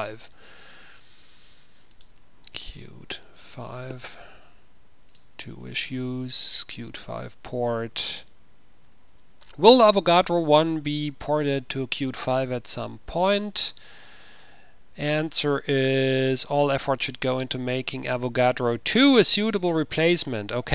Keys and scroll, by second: 2.4-3.4 typing, 3.4 Return.